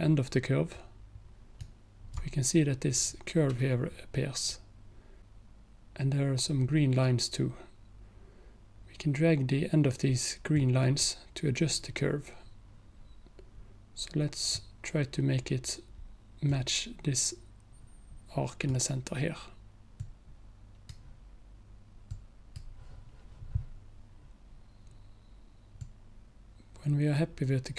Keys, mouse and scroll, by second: 10.6-15.7 drag, 16.5-19.7 drag, 20.0-24.7 drag, 25.9-27.7 drag.